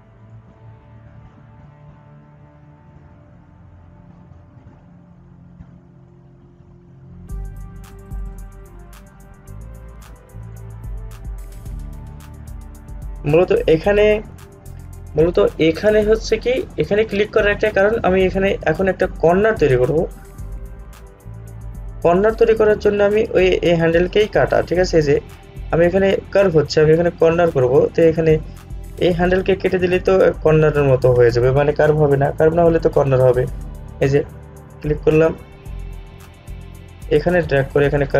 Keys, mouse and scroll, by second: 0.4-12.2 drag, 21.7-29.4 drag, 34.6 click, 36.8-38.1 drag.